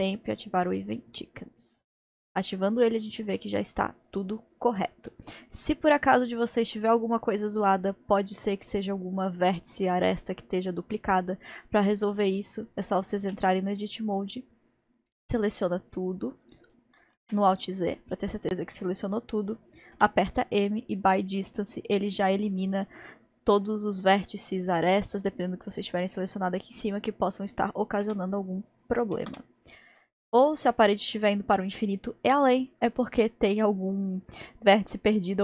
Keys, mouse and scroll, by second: 6.6-7.2 scroll down 1, 7.2-8.0 scroll down 1, 8.0-10.2 scroll up 1, 13.2 Tab, 13.9-14.4 scroll down 2, 14.4-14.9 scroll up 1, 15.2 scroll down 1, 15.6 click, 17.2 a, 17.6 alt+z, 17.9 click, 19.9 m, 25.7-26.4 drag, 28.0 Tab, 29.2 alt+z, 29.6-30.4 scroll up 1, 30.4-30.7 scroll up 1, 30.7-33.4 scroll down 1.